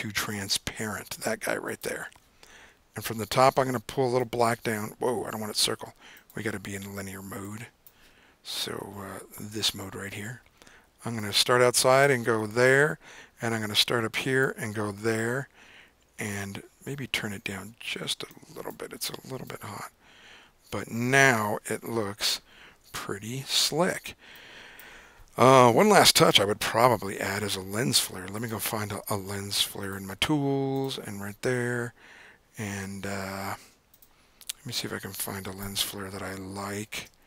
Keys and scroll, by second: 5.2 super+z, 22.4 super+Tab, 22.9 super+Tab, 26.6 super+o, 35.2 Down, 35.3 Down, 35.8 Down, 36.2 Down, 36.6 Down, 37.1 Down.